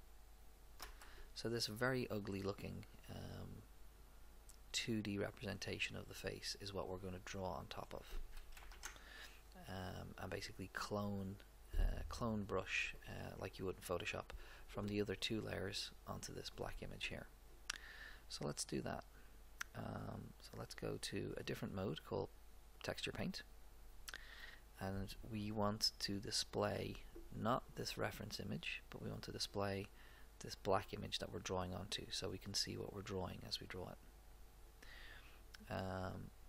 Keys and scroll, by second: 0.8 Return, 8.7 ctrl+Up.